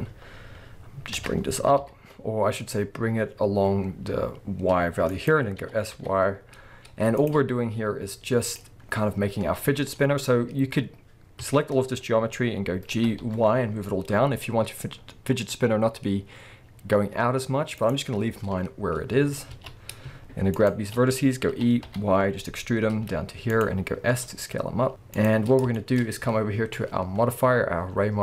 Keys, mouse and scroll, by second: 1.2 g, 5.3 click, 5.6 s, 7.3 click, 7.5-7.9 scroll down 1, 7.9 s, 8.6 click, 8.8-9.4 scroll down 1, 9.4 scroll up 1, 11.4 a, 12.9 g, 17.9 right click, 18.2-18.6 scroll down 1, 18.6-19.1 scroll up 1, 19.2-19.5 alt+scroll up 1, 19.5 alt+a, 19.8-20.5 scroll up 1, 20.5 alt+shift+click, 21.5 e, 23.6 click, 24.0 s, 25.2 click, 25.5 scroll down 1, 25.7-28.2 shift+middle drag, 26.0-26.8 scroll up 1.